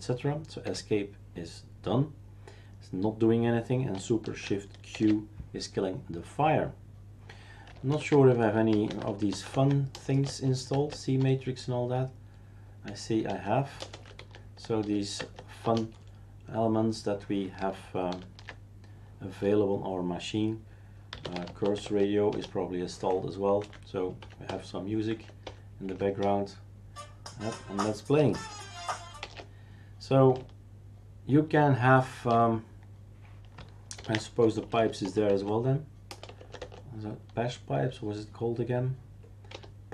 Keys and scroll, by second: 0.6 Escape, 4.9 shift+super+q, 7.9 ctrl+alt+t, 13.3-14.8 typing, 15.2 Tab, 15.6 Return, 18.1 ctrl+alt+t, 20.9-21.9 typing, 22.3 Return, 23.6 Down, 24.2 Down, 24.5 Return, 25.1 Down, 25.4 Return, 25.9 Down, 26.2 Return, 29.2 shift+super+q, 33.9 ctrl+alt+t, 39.5-39.9 typing.